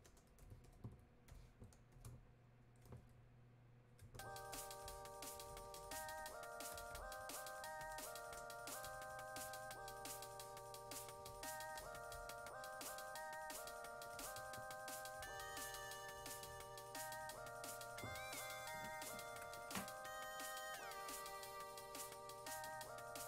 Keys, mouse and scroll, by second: 20.8-23.2 drag.